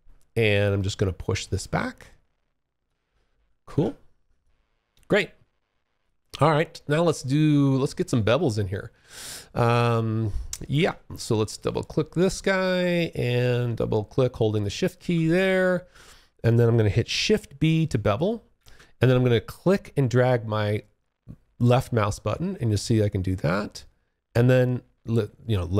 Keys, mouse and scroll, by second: 0.3 click, 2.9 Escape, 3.6 alt+click, 5.3 alt+middle click, 5.9 alt+click, 10.7 click, 10.9 double click, 12.1 alt+click, 13.7 shift+click, 14.5 alt+click, 17.7 shift+b, 18.8 click.